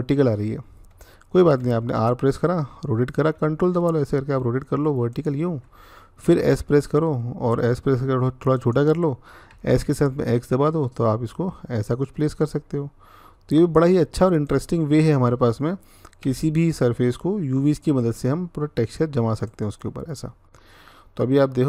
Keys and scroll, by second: 1.4 r, 6.0 s, 9.3-9.6 typing, 16.0 g.